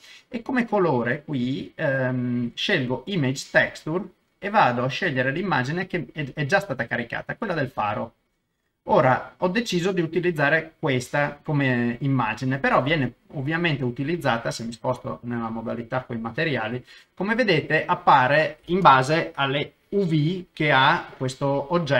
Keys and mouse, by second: 1.4-3.9 drag, 4.9-8.0 drag, 15.4 click.